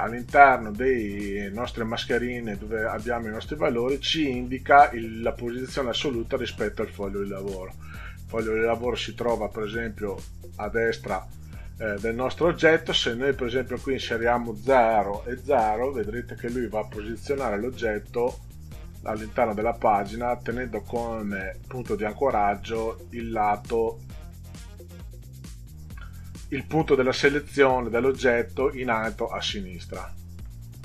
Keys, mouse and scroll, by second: 7.5-8.6 middle drag, 13.5 click, 15.1 KP_0, 15.9 click, 16.5 KP_0, 18.5 click.